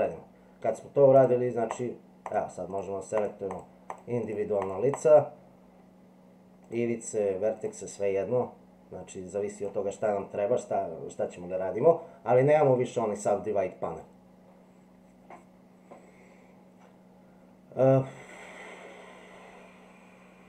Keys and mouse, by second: 1.7 click, 2.2 click, 3.2 click, 3.9 click, 4.2 click, 4.9 click, 6.6 click, 7.6 click, 9.5 click.